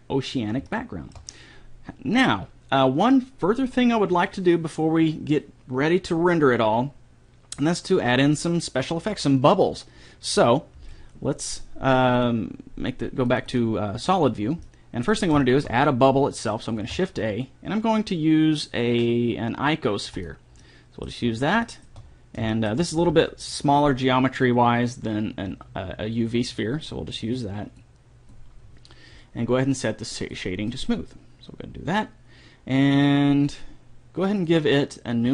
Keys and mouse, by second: 0.0-1.6 drag, 1.2-7.2 middle drag, 1.2 right click, 12.6-15.1 drag, 15.1-17.3 middle drag, 21.1 middle click, 22.3 middle click, 28.2-30.2 drag, 34.8-35.3 drag.